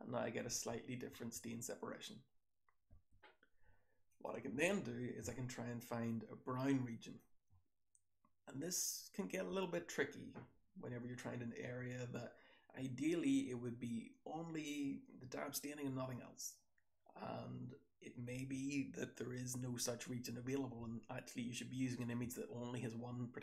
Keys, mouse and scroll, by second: 0.4-2.0 scroll down 1, 0.4 2, 1.1 1, 2.0-3.3 scroll down 1, 3.3-4.0 scroll down 1, 4.0 click, 4.0-7.1 scroll down 2, 4.5 BackSpace, 5.2-7.1 drag, 7.1-8.6 scroll down 1, 8.6-10.0 scroll down 1, 10.0-14.0 scroll down 1, 14.0-15.3 scroll down 1, 15.3-16.6 scroll down 1, 16.6-18.0 scroll down 1, 18.0-20.6 scroll down 1, 20.6-23.3 scroll down 1, 23.3-23.4 scroll down 1.